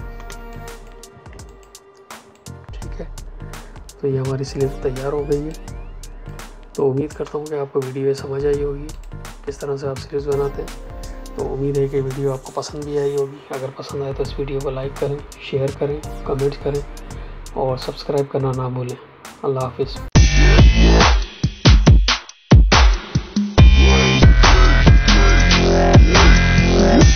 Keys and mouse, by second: 0.2 space, 0.4 click, 0.7 space, 1.2 ctrl+space, 1.4 ctrl+alt+click, 2.3 click.